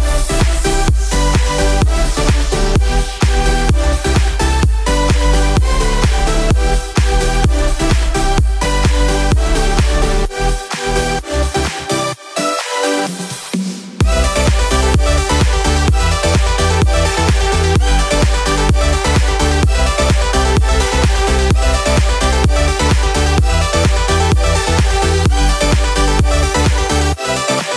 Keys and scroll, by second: 4.9 ctrl+z, 5.6 ctrl+z, 24.0 ctrl+z, 26.4 ctrl+z.